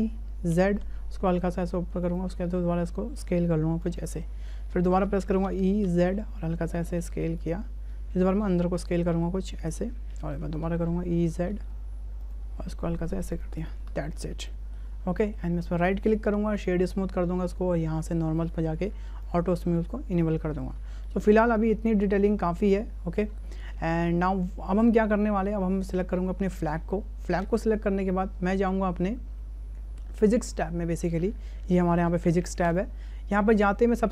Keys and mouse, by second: 2.2 s, 5.4 e, 7.8 s, 10.3 e, 12.4 s, 13.7 Tab, 14.5-14.8 shift+drag, 15.2 shift+click, 15.8-16.6 drag, 18.5 click, 19.2 click, 21.0-21.4 shift+middle drag, 21.9-22.2 shift+middle drag, 22.7-23.1 shift+middle drag, 23.7-24.2 shift+middle drag, 25.2 shift+middle click, 32.7 click.